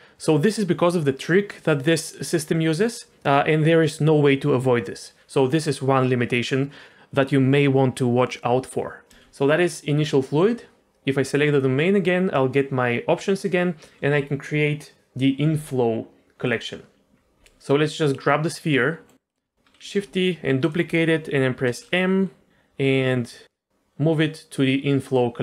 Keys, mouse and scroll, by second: 9.1 right click, 9.1 d, 9.1 d, 9.2 d, 11.5 click, 16.4 click, 17.9 click, 18.3 middle click, 19.3 middle click, 19.8 shift+d, 21.6 m.